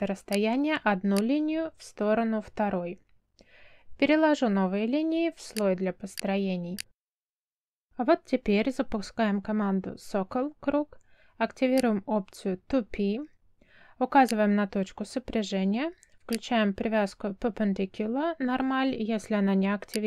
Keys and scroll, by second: 1.6 space, 3.6 m, 4.5 space, 7.4 space, 9.6 c, 10.6 space.